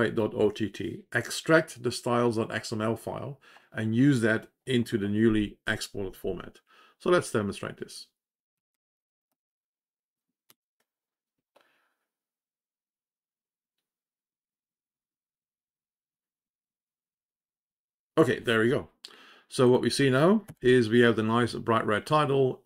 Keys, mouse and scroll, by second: 10.6 t, 11.2 ctrl+o, 19.6 click, 21.0 shift+p.